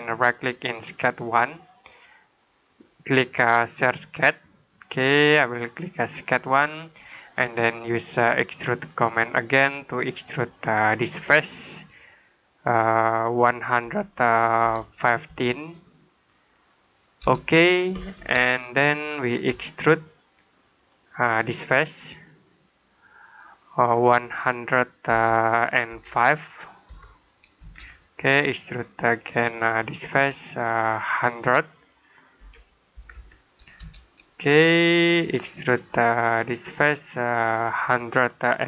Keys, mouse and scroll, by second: 1.0 right click, 4.2 click, 10.9 click, 13.7-15.1 typing, 17.1 Return, 18.3 middle click, 20.6 click, 24.9-26.7 typing, 27.5 Return, 29.2 click, 32.2-33.0 typing, 33.6 Return, 35.6 click, 38.5-38.6 typing.